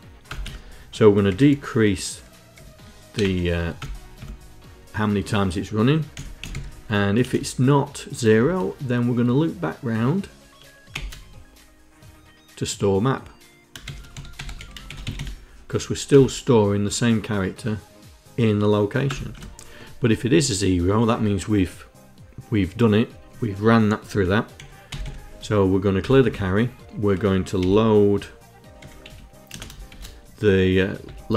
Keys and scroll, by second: 0.0 Return, 0.1 Tab, 0.9 d, 2.2 e, 2.8 BackSpace, 2.9 c, 3.4 Return, 5.6-6.9 typing, 10.6 shift+;, 13.3-15.3 typing, 15.8 Return, 18.8 Return, 24.2 v, 24.5 l, 25.7 Return, 25.9 Tab, 27.2 l, 28.4 d, 28.7 a, 29.1 space, 29.5 shift+l, 30.9-31.3 typing.